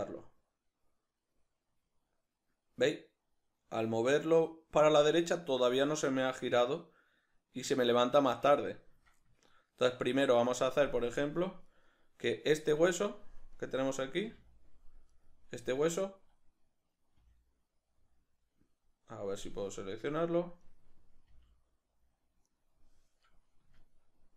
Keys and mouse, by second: 8.3 right click, 9.5-11.8 ctrl+middle drag, 11.8 right click, 13.6 right click, 14.1 a, 15.1 right click, 17.1 g, 19.9 right click, 20.7 right click, 21.3 g, 22.5 right click, 23.8-24.3 ctrl+middle drag.